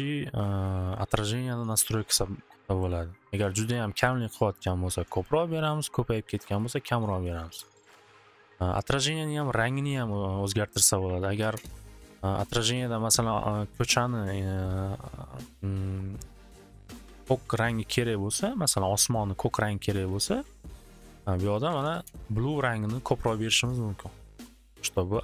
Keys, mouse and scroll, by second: 6.4 click, 6.6 click, 7.2-8.1 typing, 10.8-11.6 typing, 10.9 click, 11.0 click, 12.6 click, 14.2 typing, 16.2-17.8 drag, 20.1 click, 20.7 click, 21.4-22.3 typing, 21.4 click, 21.5 click, 24.0 typing.